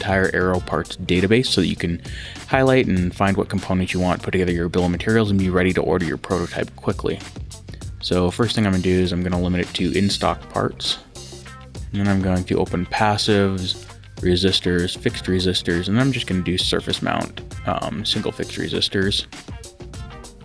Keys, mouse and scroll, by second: 8.3 click, 9.7 click, 11.8 click, 13.7 click, 15.0 click.